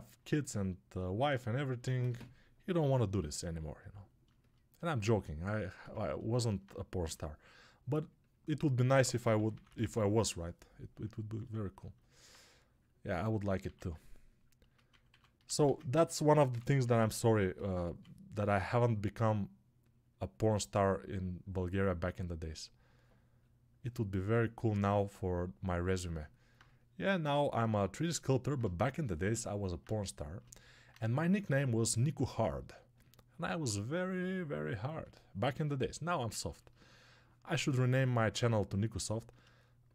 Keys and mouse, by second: 26.0-39.9 alt+drag.